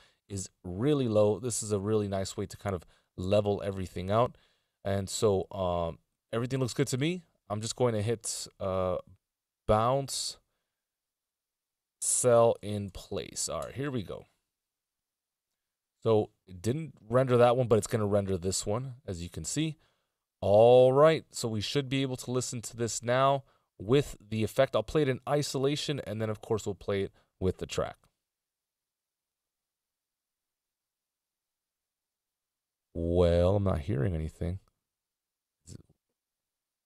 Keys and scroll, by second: 10.5 shift+b, 12.6-13.6 typing, 14.2 Return.